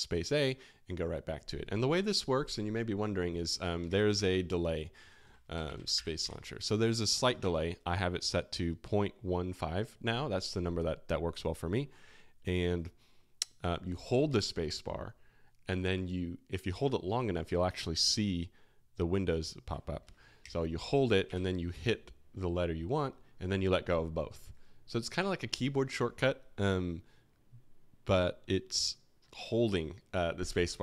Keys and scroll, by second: 3.8 super+space, 3.9-6.8 typing, 7.4 alt+t, 16.0 typing, 21.0-21.7 typing, 28.1 typing.